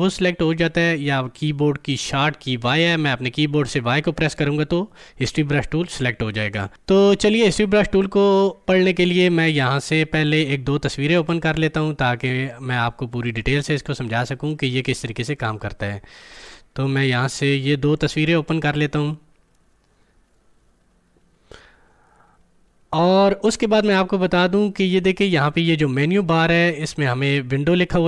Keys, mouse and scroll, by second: 10.2-17.6 drag.